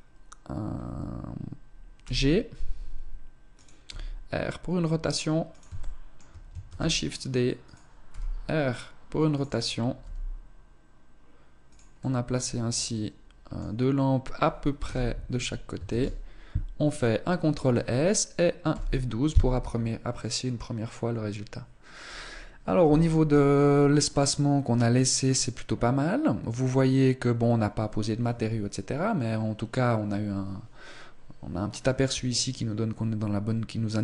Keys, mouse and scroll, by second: 1.8 g, 3.6 r, 5.6 shift+middle click, 6.5 shift+d, 7.9 r, 9.2 click, 9.8 g, 11.8 middle click, 14.6 KP_0, 15.8 ctrl+s.